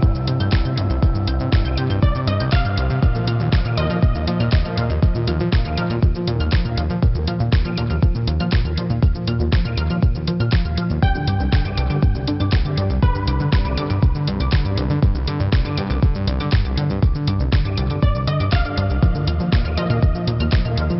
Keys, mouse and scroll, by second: 0.0 z, 0.5 click, 1.1 v, 1.3 ctrl+g, 1.3 click, 1.9 ctrl+g, 3.1 ctrl+click, 3.8 ctrl+click, 4.9 v, 5.1 click, 5.3 Right, 5.6 click, 5.9 ctrl+z, 8.3 z, 8.7 click, 11.5 space, 11.7 click, 11.9 space, 12.0 v, 12.9 ctrl+alt+click, 13.8 a, 14.0 click, 14.4 Left, 15.8 click, 15.9 -, 16.1 space, 16.2 click, 16.3 v, 16.4 ctrl+1, 17.9 click, 18.5 space, 18.6 click, 18.7 space, 19.1 click.